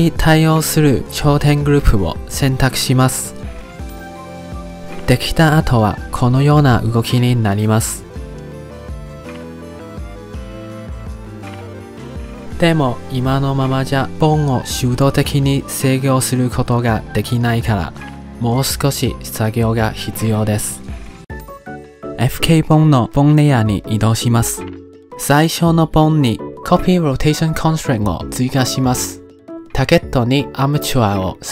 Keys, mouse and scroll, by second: 0.0 click, 0.9 click, 1.7 click, 2.7 click, 3.4 click, 4.2 click, 6.0-12.3 drag, 12.9 r, 14.7 click, 14.9-15.7 drag, 16.0 ctrl+z, 17.0-18.5 drag, 18.6 ctrl+z, 19.6-21.9 drag, 23.4 click, 24.2 click, 25.4 click, 26.6 click, 27.2-29.3 drag, 30.9-31.5 drag.